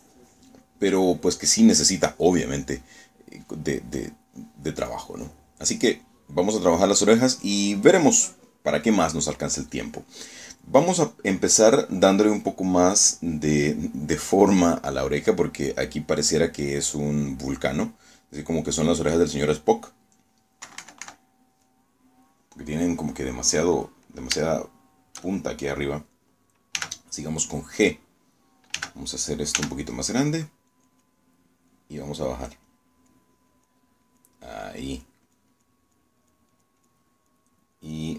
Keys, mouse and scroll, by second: 2.1 click, 5.0 click, 5.9 click, 20.3 scroll up 1, 21.8 KP_Subtract, 22.3 click, 22.8 scroll up 2, 22.9 scroll down 1, 23.0 middle click, 23.0 click, 25.6 shift+click, 27.0 click, 27.8 g, 29.8 g, 30.6 f, 32.0 click, 32.8 click, 33.8 click, 34.6 click, 35.2 click, 35.6 click, 36.0 click, 36.4 click, 37.3 click.